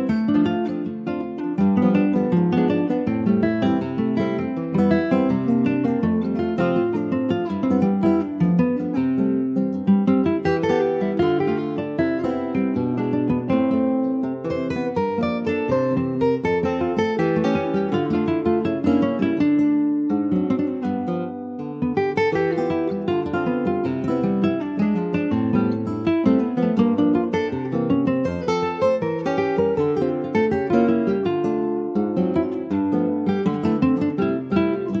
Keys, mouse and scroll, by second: 0.2 ctrl+z, 0.8 middle click, 1.6 scroll down 1, 1.9 middle click, 2.5 s, 5.9-7.2 middle drag, 7.6 alt+middle click, 8.2-9.0 scroll up 1, 9.0 shift+middle click, 9.7 s, 13.2 middle click, 13.6-14.5 scroll up 1, 14.5-16.2 shift+middle drag, 16.2 3, 16.4 click, 17.1-17.6 scroll down 1, 17.6 Tab, 18.1 click, 18.8-19.1 scroll down 2, 19.1-20.8 middle drag, 20.8 shift+click, 21.4 alt+z, 22.9 ctrl+z, 23.4 shift+click, 24.3 shift+click, 25.0 alt+z, 25.6 middle click, 26.1-26.6 scroll up 1, 26.7 click, 28.3-31.0 middle drag, 31.0 click, 33.1-35.0 middle drag.